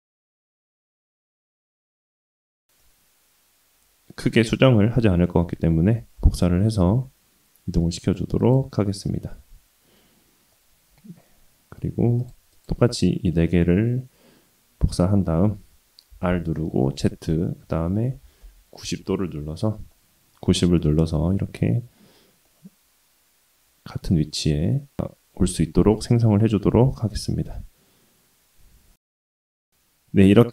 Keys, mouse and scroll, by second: 2.8-4.9 middle drag, 6.1 shift+d, 8.7-10.0 middle drag, 10.0-10.5 scroll down 1, 10.5-11.8 middle drag, 12.1 shift+click, 12.5 shift+click, 12.9-13.5 middle drag, 15.3 shift+d, 19.9-22.1 middle drag, 22.4-25.8 middle drag, 26.4-27.7 middle drag, 28.1-29.8 middle drag, 29.8-30.5 drag.